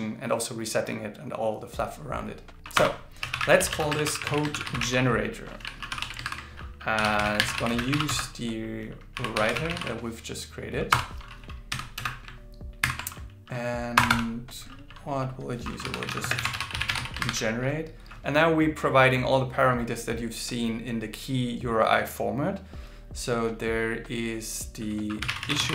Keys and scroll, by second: 4.5 shift+g, 6.2 shift+8, 12.8 alt+8, 18.2 shift+8.